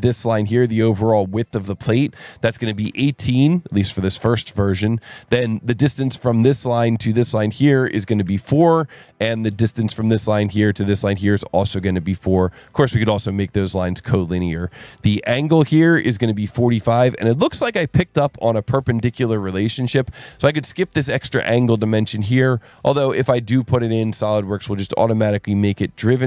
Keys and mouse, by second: 1.6 click, 2.4 KP_1, 2.5 KP_8, 2.8 KP_Enter, 6.1 click, 7.1 click, 7.6 click, 8.2 KP_4, 8.5 KP_Enter, 9.7 click, 10.9 click, 11.7 click, 12.7 KP_4, 12.9 KP_Enter, 15.6 click, 16.7 click, 18.1 click, 18.9 KP_4, 19.1 KP_5, 19.3 KP_Enter, 21.3 click, 22.7 click, 24.4 click, 25.1 click.